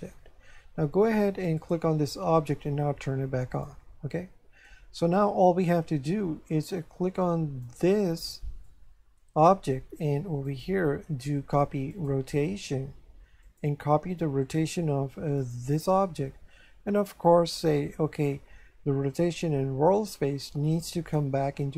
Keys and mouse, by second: 1.6 right click, 3.5 click, 4.7 shift+middle click, 7.6 right click, 8.7 shift+middle click, 10.5 click, 11.9 click, 13.4 click, 15.4 click, 20.7 click.